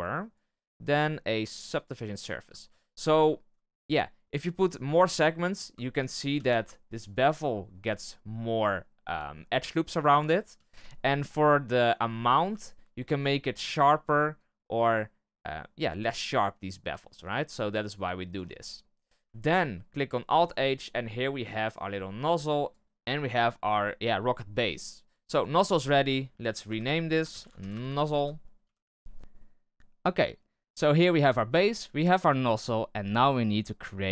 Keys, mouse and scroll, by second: 2.6 w, 3.2-4.0 shift+middle drag, 4.0-5.4 scroll up 1, 5.4 click, 5.7 shift+middle drag, 6.0 scroll up 1, 6.3 z, 6.6-6.9 shift+middle drag, 6.9-8.0 scroll up 2, 8.0-10.1 middle drag, 10.1-10.5 scroll up 1, 10.5 z, 11.5-12.5 scroll down 4, 12.5-14.3 shift+middle drag, 14.3-18.5 shift+drag, 18.5 scroll down 1, 18.7-20.2 middle drag, 20.2 alt+h, 20.5 scroll down 1, 20.8-21.2 middle drag, 21.2 scroll up 1, 21.3-22.6 middle drag, 22.6 scroll down 1, 22.7 click, 24.4-24.7 scroll down 1, 25.2-27.8 drag, 27.8 z, 29.2-30.3 shift+middle drag.